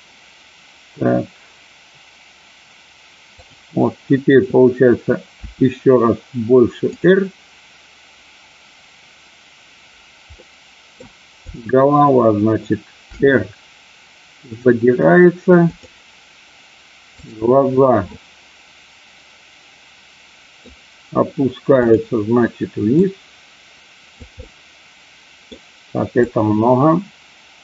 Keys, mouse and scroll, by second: 5.3 r, 10.4 middle click, 11.4 click, 13.0 r, 15.7 click, 17.2 click, 18.0-20.5 middle drag, 23.0-24.2 drag, 24.4-25.4 middle drag, 26.2-27.6 drag.